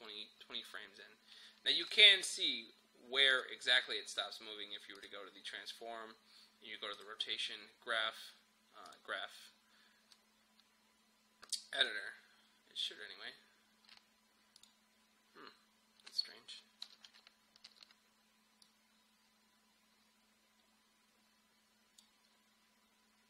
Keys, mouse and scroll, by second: 11.5 click, 16.9 typing, 18.7-23.2 drag.